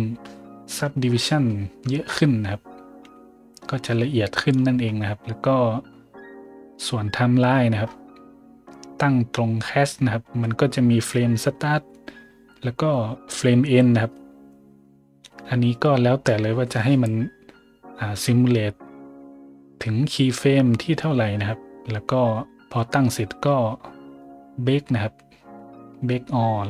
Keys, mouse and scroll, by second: 1.1-1.4 scroll up 1, 2.0 scroll up 1, 4.8 scroll up 4, 5.4 scroll down 1, 6.0-6.5 scroll down 2, 7.8 scroll down 2, 9.0 scroll up 2.